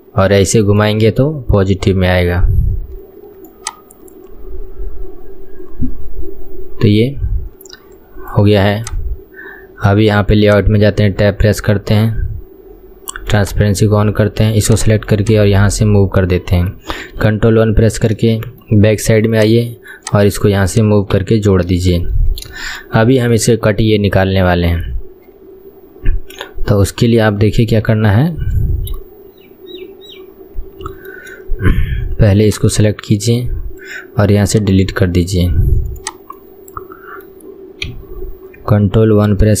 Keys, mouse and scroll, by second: 1.2 KP_1, 3.6-6.6 ctrl+drag, 8.8-10.6 ctrl+drag, 10.9 Tab, 13.4 click, 14.8 click, 15.2 click, 17.2 ctrl+KP_1, 18.0-18.4 scroll up 2, 18.4-19.5 shift+middle drag, 19.5 click, 20.2 click, 20.8 click, 21.3 KP_1, 21.6-22.0 scroll down 2, 22.0-22.5 shift+middle drag, 22.5 scroll down 1, 22.8-23.1 shift+middle drag, 23.1-23.5 scroll up 2, 23.5-26.3 shift+middle drag, 26.3-28.0 scroll up 1, 28.0-30.6 shift+middle drag, 30.6-31.1 scroll up 2, 31.1-33.5 shift+middle drag, 33.5 click, 34.6-36.1 right drag, 36.1 click, 36.5-38.0 middle drag, 38.0 KP_1, 39.0 ctrl+KP_1.